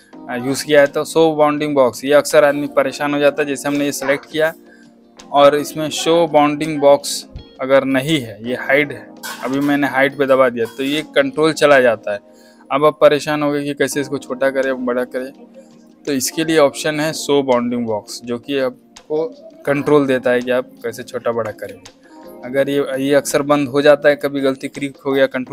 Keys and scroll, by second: 3.2 v, 21.6 ctrl+z.